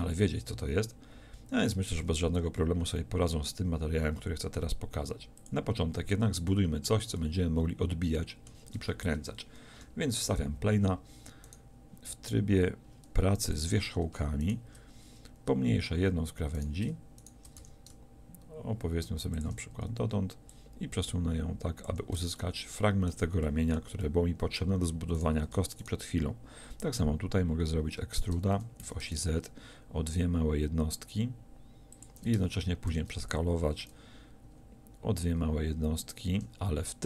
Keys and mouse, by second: 8.8 Tab, 9.8 KP_7, 17.6 s, 22.4-23.5 middle drag, 25.2-28.3 middle drag, 28.3 e, 32.1-35.1 drag, 32.9 s.